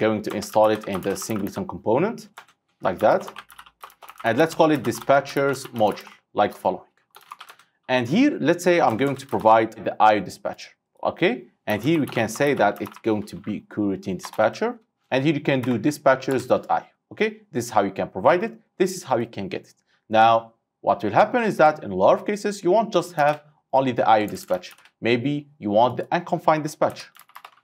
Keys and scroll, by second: 14.9 Return, 23.3 ctrl+c, 24.8 ctrl+v.